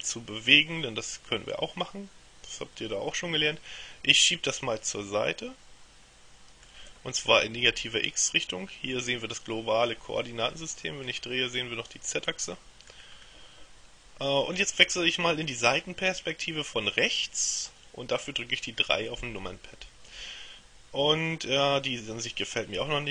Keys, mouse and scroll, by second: 11.1-13.5 middle drag, 19.3 KP_3.